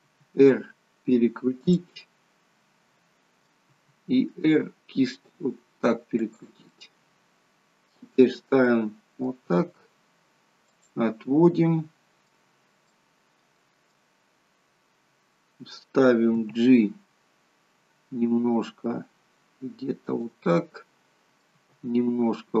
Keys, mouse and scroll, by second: 0.1 r, 2.0 middle click, 3.8 r, 6.7 middle click, 8.2 scroll down 3, 8.6 middle click, 9.6 r, 11.5 middle click, 12.5-12.9 scroll up 2, 13.0 middle click, 14.1 scroll down 1, 15.2 scroll down 1, 16.5 g, 20.5 middle click, 21.7 g.